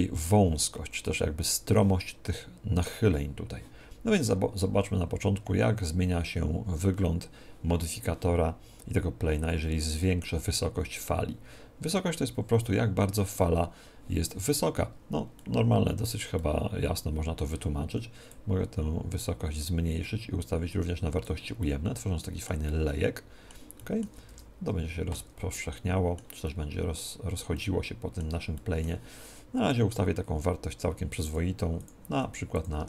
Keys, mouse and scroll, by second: 15.4-18.2 middle drag, 18.2-21.6 drag, 21.6-25.4 middle drag, 24.3 alt+a, 25.4 Escape, 27.0-30.2 middle drag, 29.6-32.8 drag, 32.0 1.